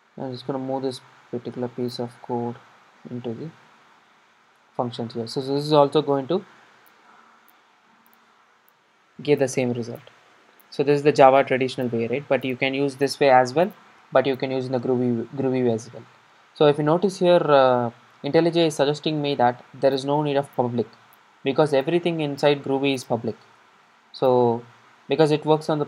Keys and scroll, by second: 3.1 super+x, 4.4 super+v, 7.3 super+r, 23.6 alt+Return.